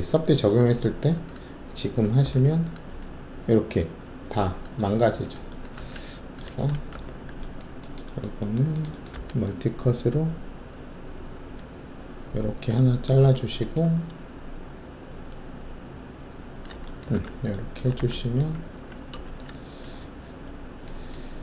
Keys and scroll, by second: 2.2 alt+3, 5.7 alt+1, 6.9 shift+3, 9.1 alt+s, 17.1 alt+shift+w, 17.9 alt+w, 18.7 alt+`, 19.2 alt+shift+q.